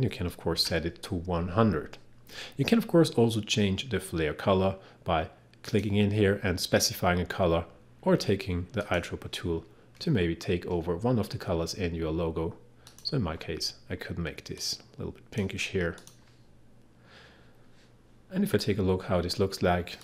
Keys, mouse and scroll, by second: 0.0-0.2 typing, 5.7 click, 8.8 click, 10.2 click, 12.9-16.0 drag.